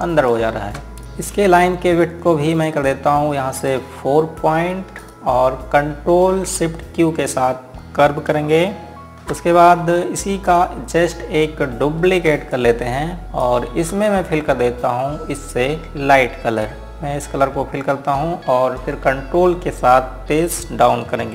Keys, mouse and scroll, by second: 0.4 click, 1.0 z, 1.4-2.7 scroll down 1, 2.7-4.3 scroll up 1, 4.3 click, 6.5 scroll up 1, 8.0 scroll down 1, 9.7 ctrl+shift+q, 10.4 click, 12.0 scroll up 1, 14.0 right click, 14.9-15.2 scroll down 1, 16.0-16.4 scroll up 1, 17.4 click.